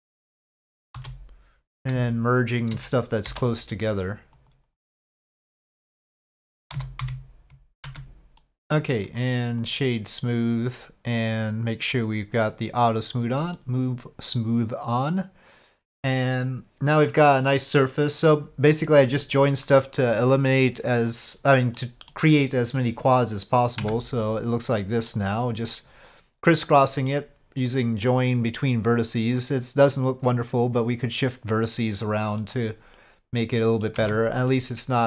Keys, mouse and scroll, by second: 0.9 j, 1.7 click, 2.2 shift+click, 3.3 m, 4.6 ctrl+z, 5.4 click, 6.7 z, 7.8 Tab, 8.4-8.7 middle drag, 9.1 click, 12.4 click, 13.5-17.5 middle drag, 21.7 middle click, 23.8 Tab, 24.8 middle click, 26.8 middle click, 32.4-33.8 middle drag, 34.0 Tab, 34.5-35.0 middle drag.